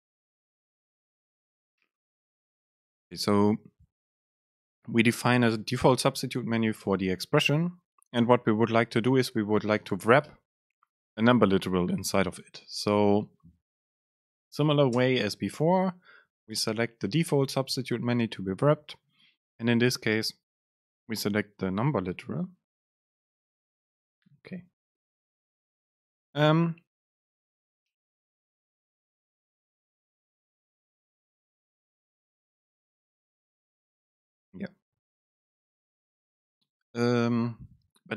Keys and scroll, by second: 9.5 super+space, 15.1 super+space, 24.7 Down.